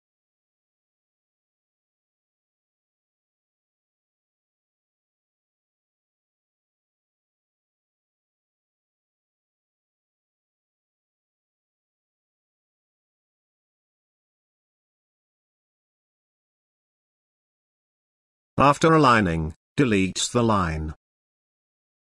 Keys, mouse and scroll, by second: 0.2 scroll up 1, 0.5 click, 2.0 space, 2.1-3.3 ctrl+click, 3.6-6.8 ctrl+drag, 7.6 ctrl+space, 8.3 ctrl+click, 8.4-13.9 ctrl+space, 10.1 ctrl+space, 10.5 ctrl+space, 15.4 click, 19.2 Delete, 20.1 space, 20.2-22.1 ctrl+drag.